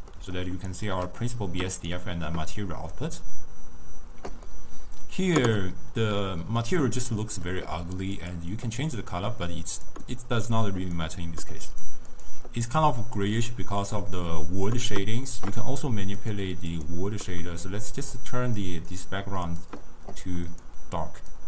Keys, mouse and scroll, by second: 1.8 click, 4.5-8.2 middle drag, 8.2 click, 11.8 click, 12.2 click, 12.7 click, 13.1 click, 16.3-19.8 drag, 20.6-21.4 drag.